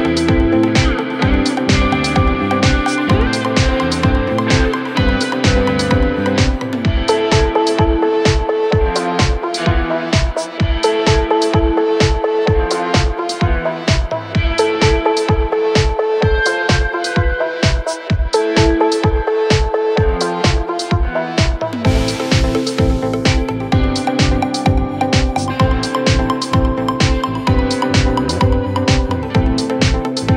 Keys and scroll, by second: 6.7 4, 8.1 2, 11.8 ctrl+d, 12.0 Escape, 12.9 4, 14.9 0.